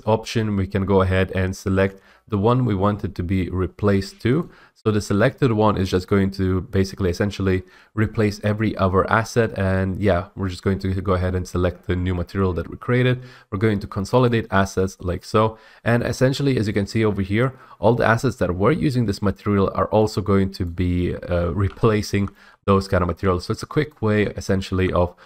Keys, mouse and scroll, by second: 4.6-6.6 drag, 14.4 click, 16.2 scroll, 16.6-17.2 scroll up 2, 20.8 click, 22.2 d, 22.5 middle click, 22.6 e, 24.1 click, 24.3-25.2 typing.